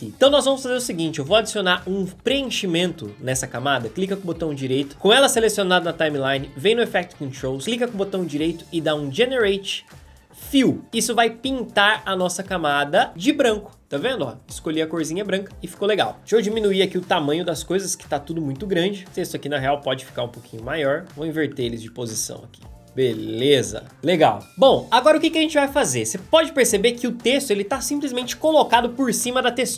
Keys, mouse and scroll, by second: 16.2 s.